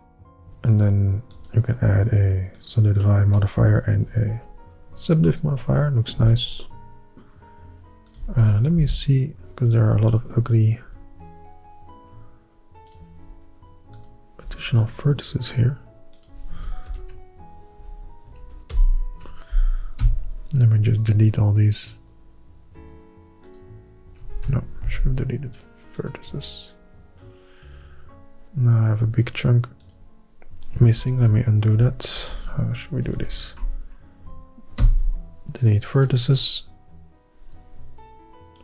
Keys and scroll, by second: 0.0 Tab, 4.4 ctrl+&, 6.3 alt+a, 8.9 shift+h, 9.7 Tab, 11.0 &, 17.0 ctrl+KP_Add, 18.8 ctrl+KP_6, 20.1 x, 24.4 ctrl+z, 30.9 ctrl+z, 31.3 ctrl+z, 33.2 ctrl+-.